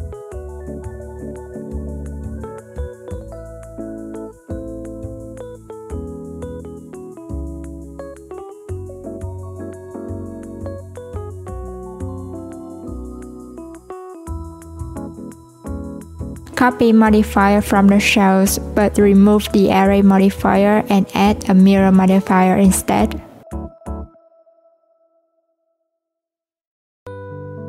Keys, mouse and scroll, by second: 0.8-1.5 scroll down 1, 1.5 click, 4.1 Tab, 5.4 click, 6.5 click, 9.0 click, 9.8 alt+z, 11.4 s, 15.6 ctrl+a, 17.8 shift+click, 18.6 ctrl+l, 20.3 click, 21.4 Tab, 21.9 a, 22.9 click, 23.7 Tab, 25.8-27.4 scroll up 1, 27.4 right click.